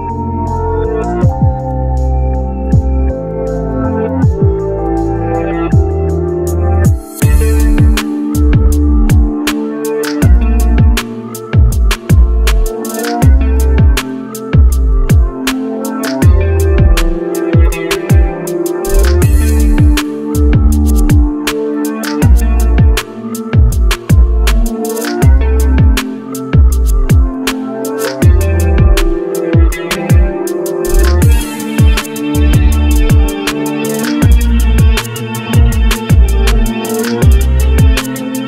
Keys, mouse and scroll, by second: 6.0 double click, 9.2 Delete, 10.6 Delete, 12.3 Delete, 29.1 double click, 32.9 double click.